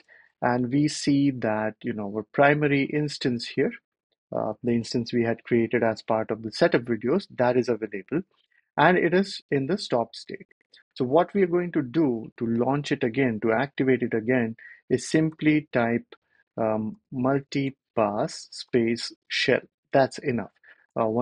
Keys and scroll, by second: 0.0-0.3 typing, 14.7-15.5 typing, 16.5-19.2 typing, 20.8 Return.